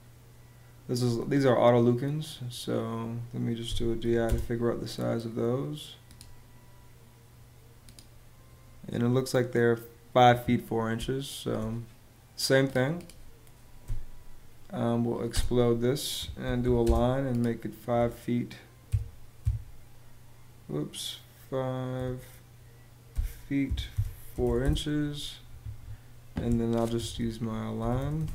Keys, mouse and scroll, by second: 3.7 i, 3.9 space, 10.0 Escape, 10.7 space, 13.5 x, 15.0-16.8 typing, 18.6 5, 19.1 space, 21.7 BackSpace, 22.8 click, 23.4 space, 23.6 4, 24.1 click, 24.3 Return, 25.3 Escape, 26.4-28.2 typing.